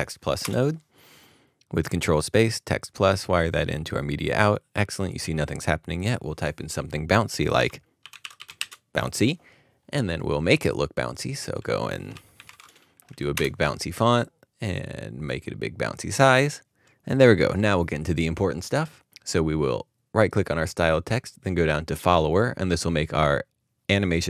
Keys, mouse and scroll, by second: 0.4 Return, 7.8-9.1 typing, 11.4 double click, 12.1-12.4 typing, 13.1 Return, 20.1 Return, 20.5 right click.